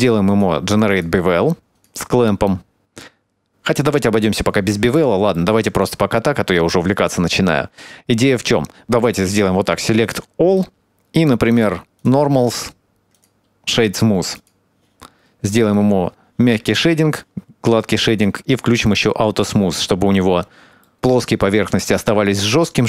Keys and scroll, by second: 15.4 Tab.